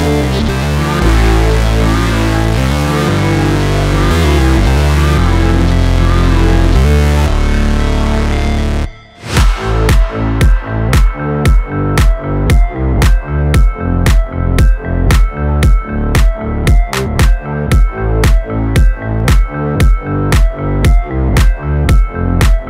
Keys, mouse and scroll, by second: 0.0 space, 1.5 click, 2.6 space, 6.3 space, 6.5 click, 8.5 click, 8.8 space, 13.4 space, 13.6 click, 14.6 ctrl+c, 14.8-15.5 scroll up 1, 15.5 click, 18.2-18.7 scroll down 1, 18.7 click, 19.8-20.3 alt+scroll up 1, 20.7 click, 21.6 alt+scroll up 1.